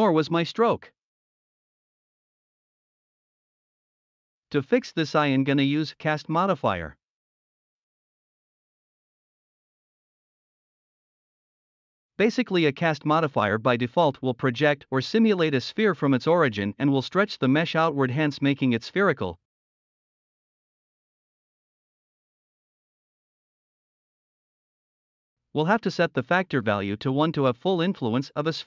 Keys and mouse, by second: 1.2 ctrl+z, 2.0 drag, 5.7-7.7 drag, 9.6 drag, 11.3 click, 17.9 d, 18.3-20.8 drag, 18.4 d, 18.5-21.6 d, 22.9 ctrl+z, 23.8 click, 24.3-26.3 drag, 27.5-28.1 middle drag.